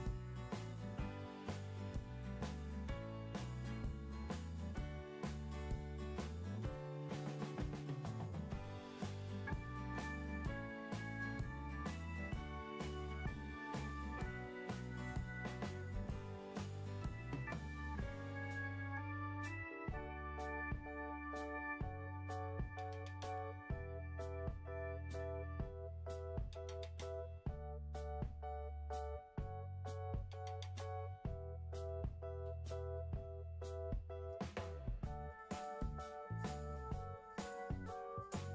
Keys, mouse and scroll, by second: 23.8-24.9 middle drag.